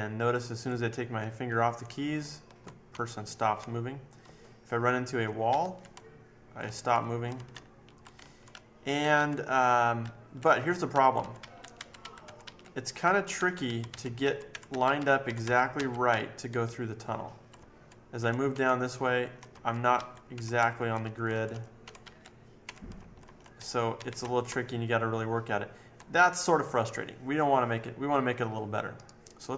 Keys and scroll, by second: 0.3 Left, 0.3 Left, 0.5 Left, 0.9 Left, 1.4 Left, 2.1 Right, 2.9 Right, 3.3 Right, 3.5 Right, 4.2 Down, 4.7 Down, 4.9 Down, 5.0 Down, 5.1 Down, 5.4 Up, 5.9 Down, 6.4 Down, 6.5 Down, 6.6 Left, 6.9 Down, 7.3 Left, 7.5 Up, 8.1 Right, 8.5 Up, 9.1 Right, 9.9 Up, 10.5 Left, 10.9 Up, 11.1 Left, 11.3 Up, 11.7 Up, 11.9 Up, 12.2 Left, 12.3 Up, 13.0 Left, 13.3 Up, 13.6 Up, 13.9 Up, 14.2 Down, 14.5 Right, 14.7 Up, 14.9 Up, 15.2 Left, 15.4 Down, 15.7 Up, 16.1 Up, 16.5 Up, 16.7 Up, 17.1 Up, 17.1-17.5 Up, 17.5 Left, 18.2 Right, 18.5 Right, 18.9 Down, 19.5 Down, 19.9 Up, 20.3 Right, 20.5 Down, 21.0 Down, 21.5 Down, 21.8 Right, 22.0 Up, 22.6 Right, 22.9 Down, 23.2 Down, 23.5 Left, 23.9 Up, 24.1 Down, 24.4 Down, 24.9 Down, 25.3 Down, 25.5 Down.